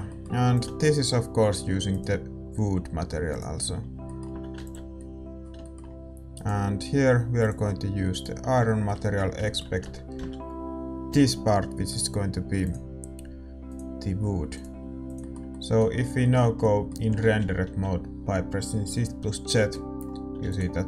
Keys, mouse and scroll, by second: 0.8 ctrl+s, 0.8-3.3 right drag, 2.2-3.8 drag, 3.8-8.2 middle drag, 4.3 a, 4.9 ctrl+s, 6.4-8.2 right drag, 8.2-9.8 drag, 8.6-9.8 middle drag, 9.8 Tab, 10.1 a, 11.1 l, 12.7-15.2 drag, 15.2 ctrl+s, 15.2 a, 18.5 shift+z, 19.7 middle click, 20.5 ctrl+s.